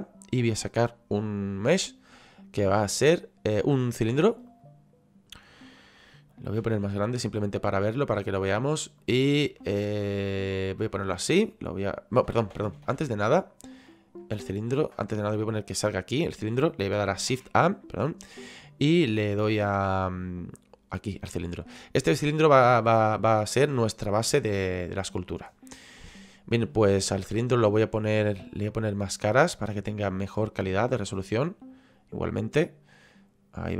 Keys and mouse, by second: 4.5 click, 7.2 click, 9.0 click, 9.8 shift+middle click, 11.2 click, 13.9 click, 15.0 click, 20.6 click, 21.3 shift+middle click, 22.3 shift+middle click, 28.7 click.